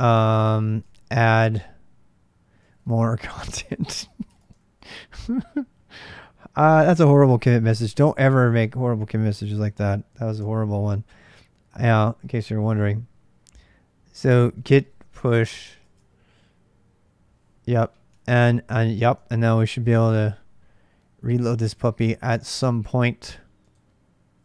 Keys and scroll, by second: 9.9 ctrl+alt+m, 13.9-15.4 typing, 15.6 Return, 17.9 super+Tab, 19.3 ctrl+r, 24.3 ctrl+r.